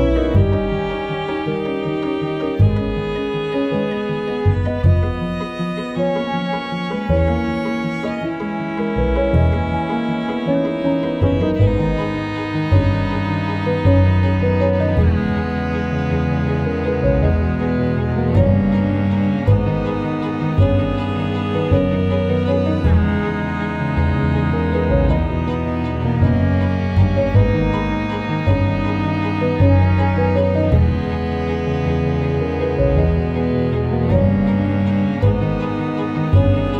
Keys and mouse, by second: 0.9 r, 2.2 alt+middle click, 2.5 shift+middle click, 2.9 KP_1, 3.2 KP_3, 3.3 g, 3.8 r, 4.4 Tab, 4.5 alt+middle click, 4.9 3, 5.0 click, 5.3 KP_1, 5.5 KP_3, 6.0 g, 8.4 r, 9.2 Tab, 9.4 alt+middle click, 10.0 middle click, 10.6 Tab, 10.8 Tab, 11.1 alt+middle click, 11.8-16.5 typing, 12.0 shift+middle click, 12.2 click, 15.5 ctrl+z, 17.9-26.1 typing, 27.5 g, 28.9 click, 29.2-32.2 typing, 29.9 click, 33.6 middle click, 34.3 KP_1, 34.8 KP_3, 35.4 shift+middle click, 35.9 KP_1, 36.3 Tab, 36.4 Tab, 36.7 Tab.